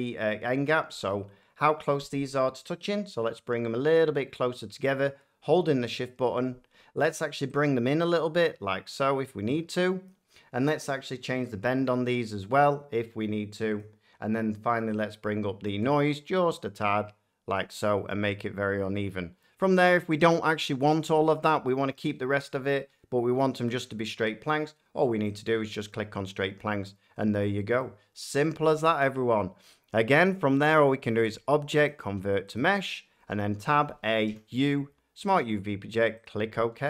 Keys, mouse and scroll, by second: 0.4 middle click, 6.2 shift+click, 10.0 click, 13.7 click, 17.5 shift+middle click, 19.3 scroll, 20.1-23.4 middle drag, 25.3 click, 26.1 click, 26.4 click, 26.7 click, 26.9-27.3 drag, 27.7 middle click, 30.7 click, 31.8 click, 32.5 click, 33.1 Tab, 33.5-34.2 typing, 35.3 click, 36.2 click, 36.7 Tab.